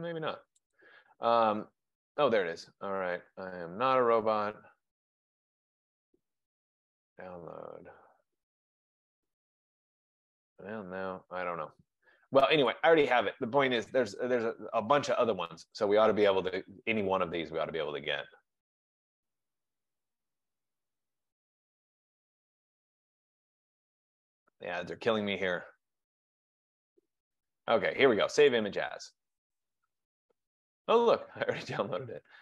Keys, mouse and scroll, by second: 0.8 click, 3.9 click, 6.7 click, 12.7 click, 15.8 click, 23.3 click, 25.8 middle click, 26.8 right click, 28.6 click.